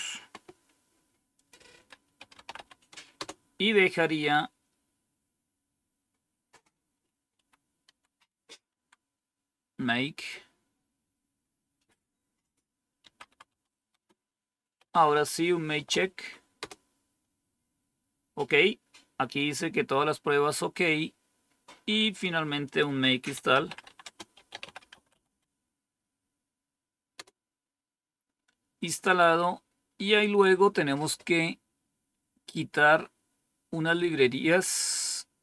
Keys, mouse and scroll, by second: 0.0-1.3 scroll down 1, 1.3 click, 1.8 click, 1.9-3.0 typing, 3.1 Return, 6.8 Up, 7.3 Up, 7.8 Down, 8.2-8.6 typing, 12.7-16.3 typing, 16.5 Return, 21.0-22.6 scroll down 1, 22.6 click, 23.0-25.7 typing, 27.1 Return, 29.4-32.0 scroll down 1, 32.0 typing.